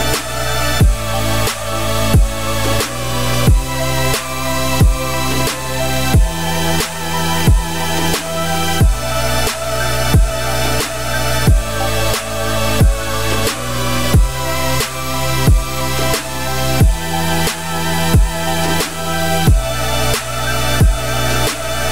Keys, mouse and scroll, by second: 2.0 z, 2.2 scroll down 2, 2.4 middle click, 2.8 a, 3.6 shift+n, 3.9 Tab, 4.3 shift+click, 5.3 ctrl+KP_Subtract, 6.5-7.0 middle drag, 7.0-8.2 scroll down 2, 8.2-11.3 drag, 12.5 shift+click, 13.6 ctrl+l, 15.8-16.2 scroll up 2, 16.2-16.8 scroll down 4, 16.8-17.7 middle drag, 17.7-18.7 scroll up 3, 18.7-19.1 scroll down 2, 19.1-21.9 middle drag.